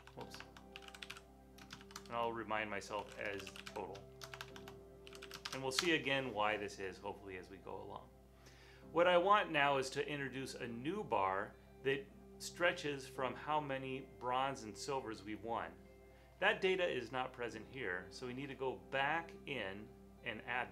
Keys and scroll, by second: 0.0-6.2 typing.